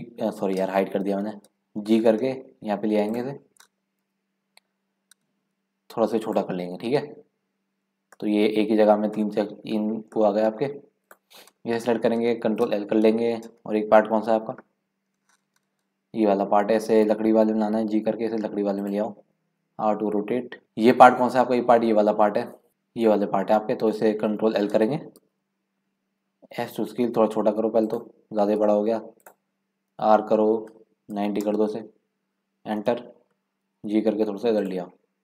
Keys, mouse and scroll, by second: 1.1 ctrl+z, 1.9 g, 4.0 KP_Decimal, 5.5 s, 6.8-8.2 scroll down 7, 8.2 middle click, 9.0 scroll up 1, 9.1 middle click, 9.9 scroll down 3, 10.3 middle click, 10.6-11.0 scroll up 2, 11.0 click, 12.7 ctrl+l, 14.4 KP_Decimal, 17.4 g, 19.7 r, 22.7 KP_Decimal, 25.2 ctrl+l, 26.5 s, 28.6 g, 29.9 r, 33.7 g.